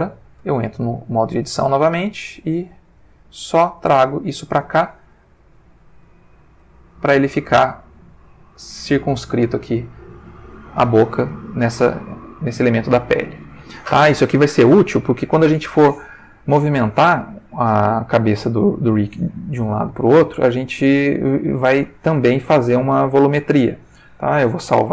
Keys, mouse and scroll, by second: 0.4 Tab, 1.0 click, 1.7 g, 2.9 click, 3.5 click, 3.6 g, 4.2 click, 5.4 click, 5.8 g, 6.4 click, 7.4 click, 7.6 g, 8.3 click, 8.8 ctrl+middle click, 11.3 Tab, 12.0 ctrl+middle click, 24.6 ctrl+s.